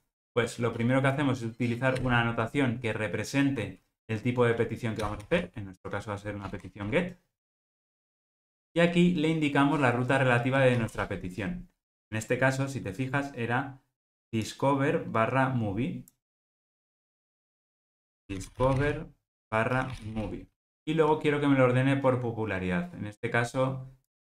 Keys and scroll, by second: 7.8 alt+Return.